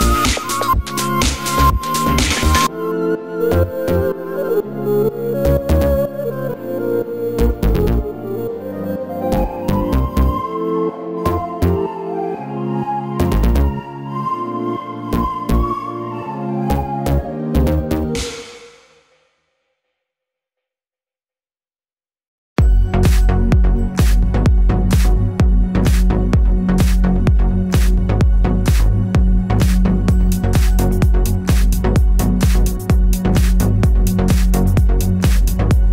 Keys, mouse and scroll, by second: 0.0 shift+middle click, 2.0-7.9 middle drag, 3.6 Tab, 7.9-11.5 drag, 9.5 g, 12.1 Tab, 15.5 click, 15.7 Tab, 16.0 click, 16.7 g, 17.5 shift+click, 18.2 click, 19.2 s, 24.5-28.7 middle drag, 25.7 KP_7, 26.1-26.7 scroll down 2, 26.7 s, 29.2 click, 30.0 g, 31.7 shift+click, 32.1 Tab, 32.4-35.9 middle drag, 34.6-35.4 scroll down 1.